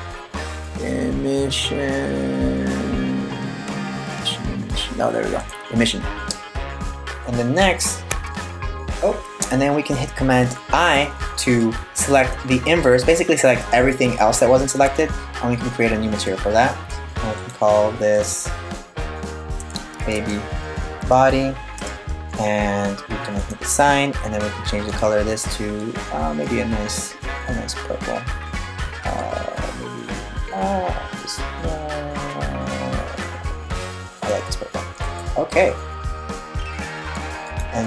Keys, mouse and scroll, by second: 7.7 Tab, 8.4 Tab, 10.6 super+i, 15.8 click, 17.0 click, 18.1 click, 23.0 click, 24.5 click, 37.1 click.